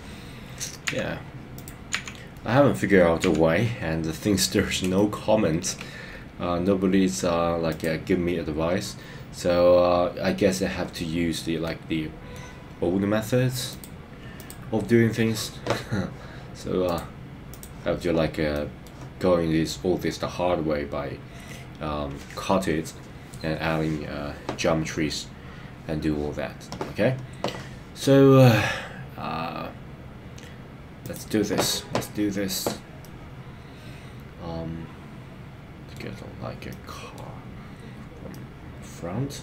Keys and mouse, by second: 2.1 KP_1, 3.3 KP_3, 4.9 shift+middle click, 11.6 middle click, 13.7 click, 16.9 click, 18.5 middle click, 33.0-36.0 middle drag, 36.7 middle click, 38.3-39.4 middle drag.